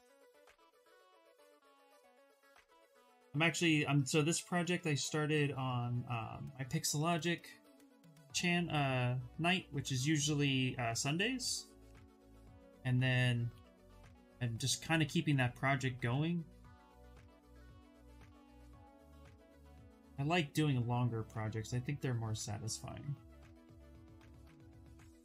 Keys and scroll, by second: 0.1 s, 24.4 s.